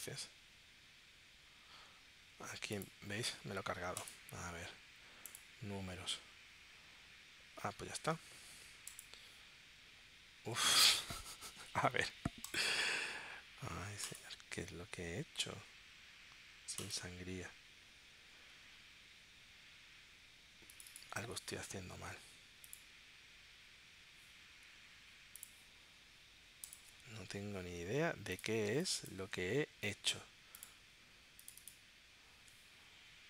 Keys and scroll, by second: 28.7 space.